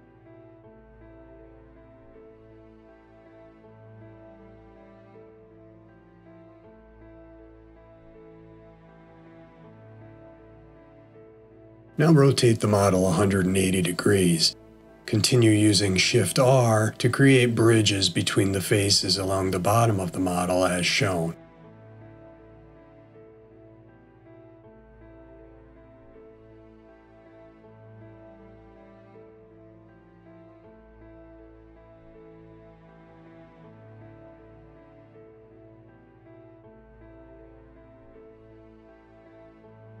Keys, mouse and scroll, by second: 0.3 middle click, 2.3 shift+middle click, 4.0 click, 4.8 shift+click, 5.9 shift+r, 7.2-8.3 scroll down 2, 8.3 middle click, 9.6 shift+middle click, 10.4 middle click, 13.2 middle click, 15.7-17.2 scroll down 2, 17.2 click, 18.3 shift+click, 19.2 shift+r, 20.2 middle click, 21.4 shift+middle click, 22.9 click, 23.8 shift+click, 24.7 shift+r, 25.5 middle click, 27.2 shift+middle click, 28.5 click, 29.4 shift+click, 30.4 shift+r, 31.1 middle click, 32.2 shift+middle click, 33.7 click, 34.7 shift+click, 35.6 shift+r, 36.5-37.8 scroll down 2, 37.8 middle click, 39.7-40.0 scroll down 2.